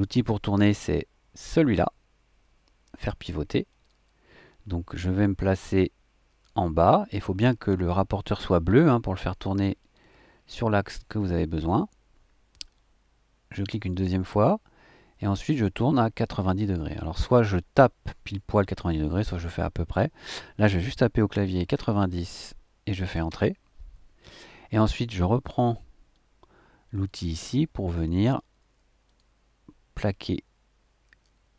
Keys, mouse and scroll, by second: 1.7-2.9 scroll up 1, 3.7 click, 9.8 click, 13.9 click, 21.4 KP_9, 21.7 KP_0, 23.3 KP_Enter, 26.9 click, 29.0 click.